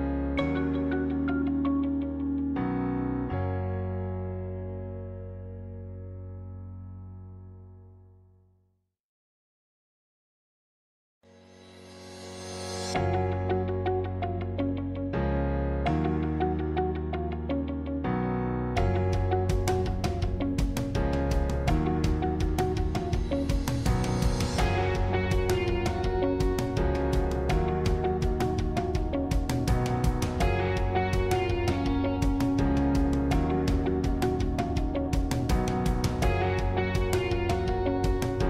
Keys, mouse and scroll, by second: 12.2-13.2 middle drag, 13.2-13.5 scroll down 1, 13.5-16.7 middle drag, 17.0-17.3 scroll down 1, 17.3-20.4 middle drag, 22.8-29.4 drag, 29.4-30.7 middle drag, 30.7 click, 32.8-35.9 drag.